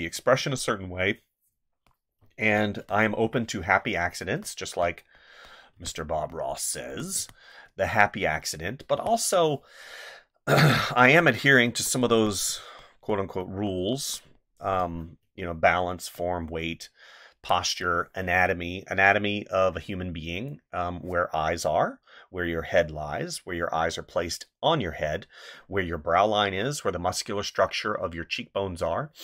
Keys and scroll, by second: 2.2 space, 5.7 space, 7.1 space, 8.9 space, 12.1 space, 14.7 space.